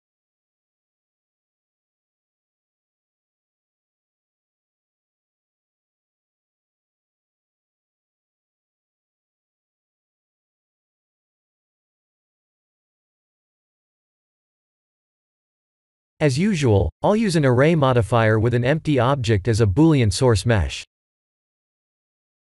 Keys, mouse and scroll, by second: 1.1 s, 3.1 click, 3.3 s, 3.6 z, 5.3 click, 5.5 g, 5.7 z, 7.6 click, 8.8-9.3 alt+shift+middle drag, 9.9 alt+shift+middle click, 10.4 alt+shift+scroll down 2, 10.9 s, 13.6 click, 14.1 s, 14.4 z, 16.6 click, 16.9 g, 17.0 z, 20.8 click, 21.1 s, 21.3 z.